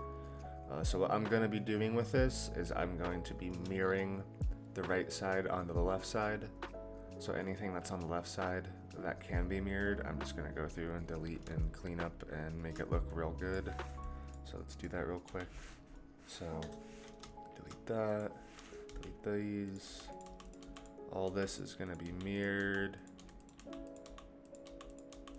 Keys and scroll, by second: 15.2 Delete, 16.5 KP_0, 18.8 Delete, 19.8-25.3 Delete.